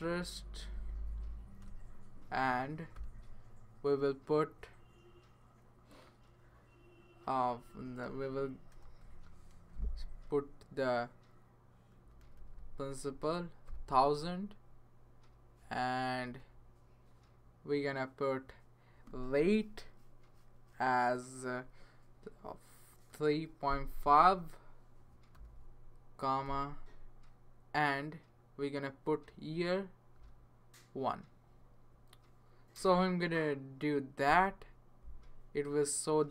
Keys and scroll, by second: 0.0-0.1 typing, 0.7 Down, 1.6 Return, 2.9 ,, 8.7 BackSpace, 9.5 (, 11.7-14.2 typing, 16.2 space, 23.1-23.7 typing, 25.1-26.5 typing, 30.2 typing.